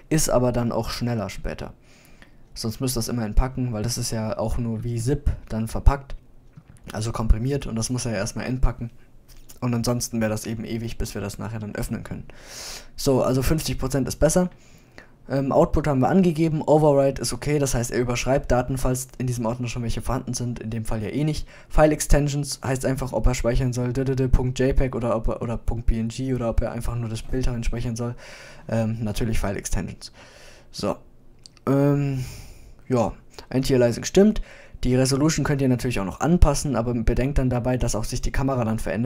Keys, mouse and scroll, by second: 12.2-14.4 middle drag.